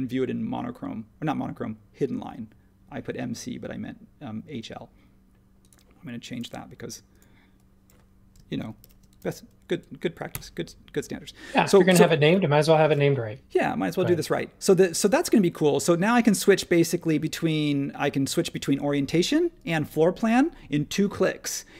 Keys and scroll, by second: 8.8 shift+h, 10.3 Return.